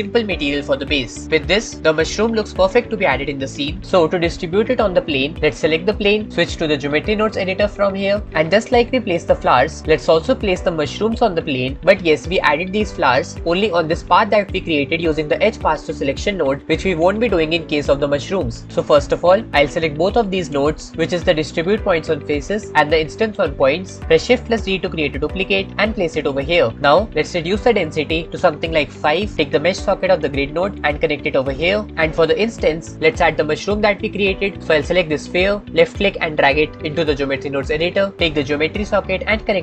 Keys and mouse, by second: 2.5-3.5 middle drag, 4.9-5.8 shift+middle drag, 6.9 click, 8.0 click, 9.1 click, 19.5-20.4 drag, 24.4 shift+d, 26.7 click.